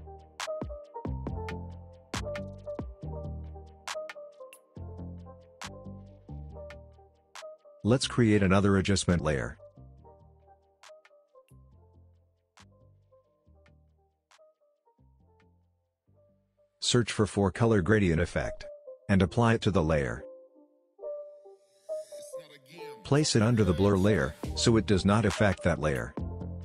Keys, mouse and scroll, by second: 7.3 right click, 12.0 click, 16.0 4, 18.1-20.1 drag, 22.6-23.8 drag.